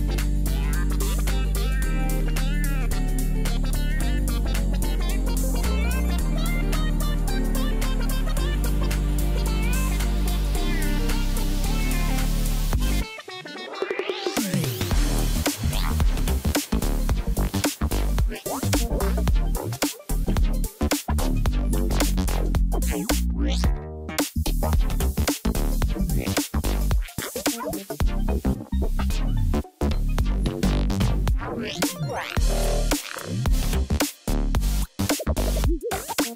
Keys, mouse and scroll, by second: 6.0 ctrl+=, 15.8 right click, 29.3 right click, 29.5 ctrl+-, 29.9 ctrl+-, 30.6 ctrl+t, 32.4 alt+click.